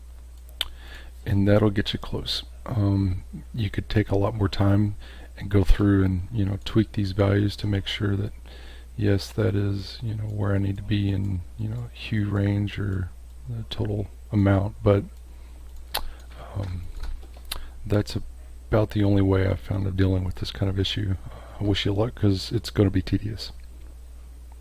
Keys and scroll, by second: 15.9 space, 16.8 space.